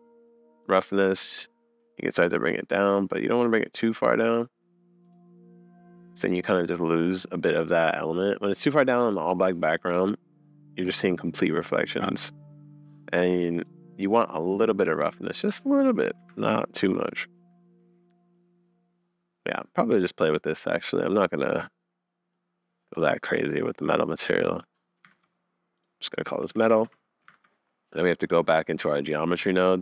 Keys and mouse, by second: 0.6-4.3 drag, 8.1-19.5 middle drag, 20.1-22.3 middle drag, 22.7 middle click, 24.3 middle click, 25.2 super+s, 25.8-26.8 drag, 27.6 super+s, 28.3 click.